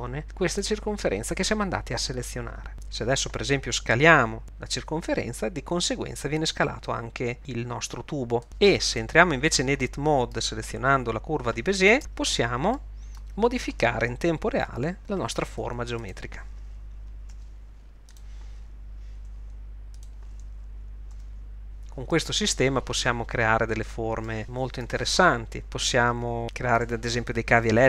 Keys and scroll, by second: 4.4 s, 12.0 Tab, 14.7 g, 15.7 e, 17.4 r, 19.3 e, 21.2 r.